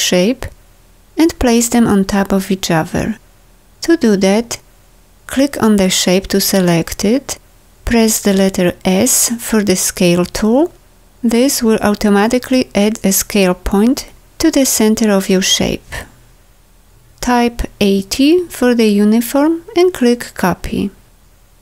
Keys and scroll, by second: 15.7 Return.